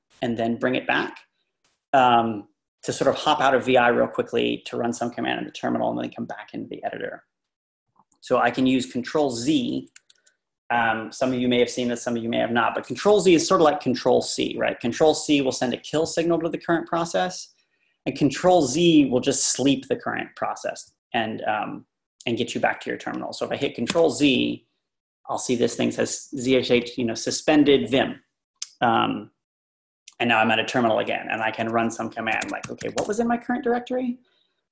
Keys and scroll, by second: 24.0 ctrl+z, 32.1-33.3 typing.